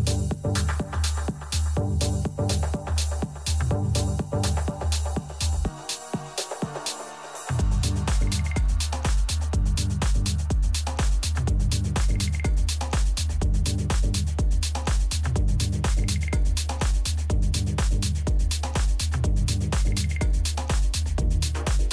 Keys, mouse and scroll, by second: 0.4 a, 0.8 a, 3.8 a, 4.8 r.